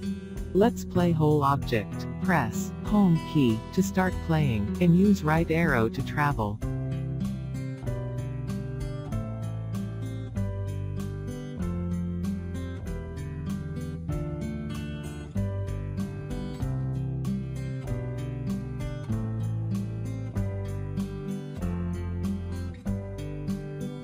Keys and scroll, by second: 1.8 Home, 5.9 Right, 6.7 Right.